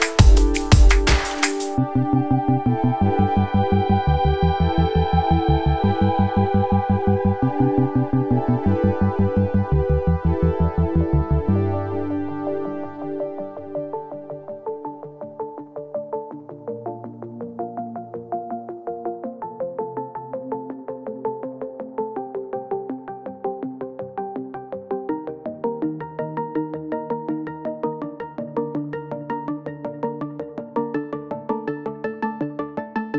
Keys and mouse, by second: 5.6 3, 6.1 a, 7.3 click, 7.3 right click, 9.0 e, 12.9 click, 13.9 shift+click, 14.7 click, 15.9 2, 16.7 ctrl+r, 17.9-19.4 drag, 19.9 alt+shift+click, 20.8 ctrl+r, 22.0 middle click, 25.3 s, 32.7-33.1 middle drag.